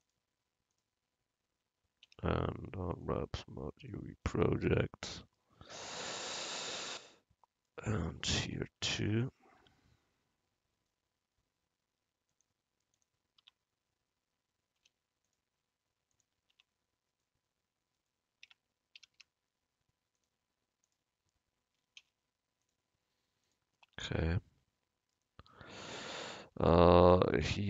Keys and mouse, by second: 0.1 click, 2.2 u, 8.3 Tab, 8.9 Tab, 9.3-13.0 drag, 9.7 Tab, 12.4 right click, 13.5 Tab, 14.9 u, 16.6 Tab, 18.5 Tab, 19.1 a, 19.2 a, 20.2-22.0 drag, 22.1 u, 24.0 Tab.